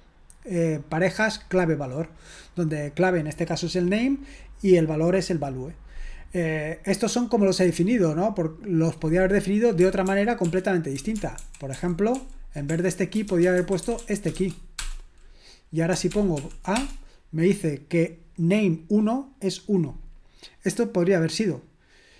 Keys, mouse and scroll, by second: 10.1 ctrl+p, 10.4 ctrl+p, 11.0 ctrl+a, 11.4 alt+f, 11.8 alt+f, 12.1 alt+f, 12.7-14.9 typing, 16.1 ctrl+p, 16.4 ctrl+p, 16.8 Return.